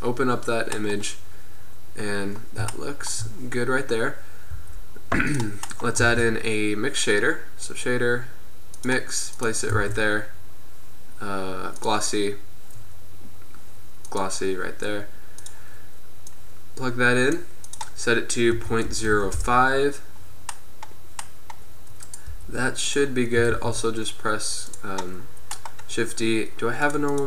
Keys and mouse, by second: 2.6-3.2 middle drag, 4.6 g, 6.1 shift+a, 9.9 shift+a, 22.5 g, 23.9 shift+d.